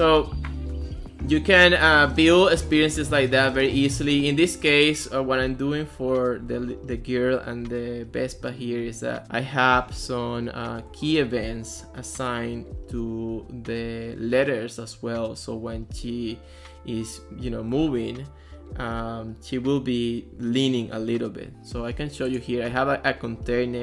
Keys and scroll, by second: 1.8 w, 2.1 a, 3.1 d, 3.4 a.